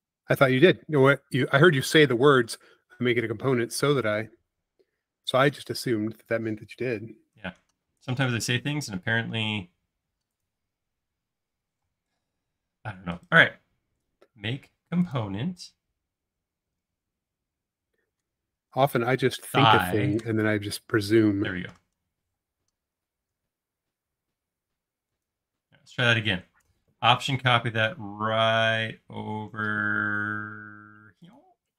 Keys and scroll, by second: 7.6 e, 9.5 space, 11.8 m, 12.5 space, 18.3-19.9 typing, 20.2 Return, 22.4 m.